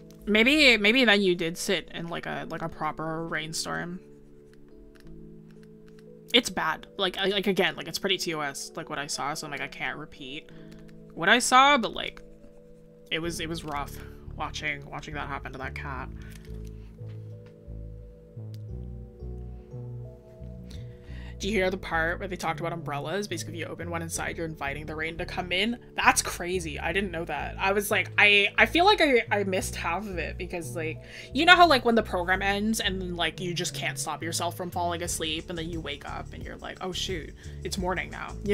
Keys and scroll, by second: 13.8 scroll down 1.